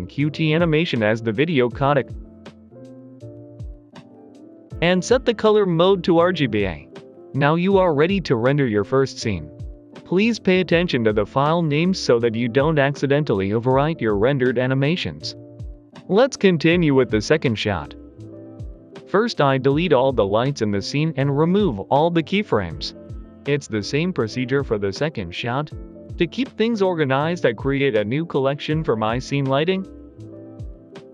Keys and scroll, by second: 14.8 ctrl+z, 15.9 a, 16.8 a, 18.2 Delete, 21.1 Delete, 24.0 Delete, 28.4-31.1 typing.